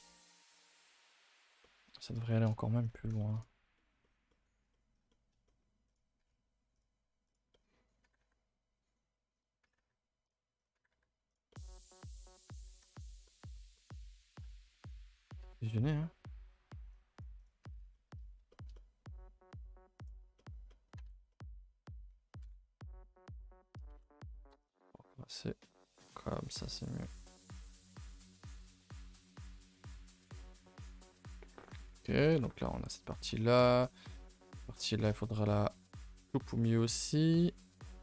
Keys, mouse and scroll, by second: 0.9 click, 1.2-1.6 drag, 1.6-1.9 middle drag, 1.9-2.8 scroll up 9, 2.3 shift+middle click, 2.8 click, 2.8 Tab, 3.2 shift+middle click, 3.4 scroll, 4.0-5.8 shift+middle drag, 5.8 click, 6.2 g, 7.2 click, 7.5 middle click, 8.0 g, 9.6 g, 10.5 click, 10.7 g, 11.5 middle click, 12.0-13.1 middle drag, 13.4 scroll up 1, 13.8 middle drag, 14.1 click, 14.4 shift+click, 17.9-18.2 middle drag, 18.8-19.9 middle drag, 19.9 click, 20.3 middle drag, 20.6 middle drag, 20.9 Tab, 21.3 middle click, 21.3-22.4 middle drag, 22.4 KP_0, 24.6 click, 26.7 click, 31.7 scroll down 3, 31.8 ctrl+s, 32.1 shift+middle click, 32.3 scroll up 1, 37.1 middle click, 37.5 scroll down 2, 37.7-38.0 scroll up 7.